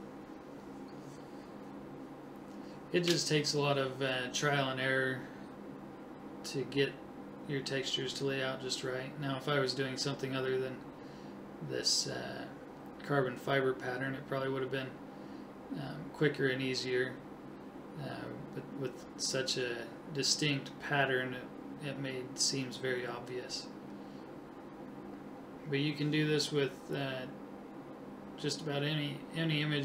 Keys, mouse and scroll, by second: 1.1 right click, 2.6 ctrl+z, 2.7 ctrl+z, 2.8 ctrl+z, 3.1 ctrl+z, 3.9 click, 5.2 right click, 6.5 click, 9.6 right click, 13.8 click, 16.6 right click, 20.7 right click, 22.1 click, 25.0-26.2 drag, 28.0 right click, 29.1 ctrl+z, 29.2 ctrl+z, 29.6 right click.